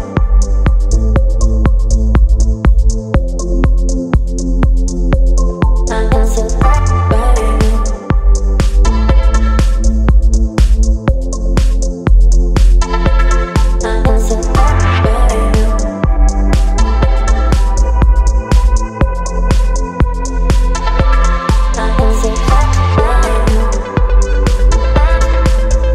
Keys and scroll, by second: 0.1 e, 8.9 space, 12.7 space, 16.7 ], 17.4 ], 17.6 ], 19.0 space, 22.8 space.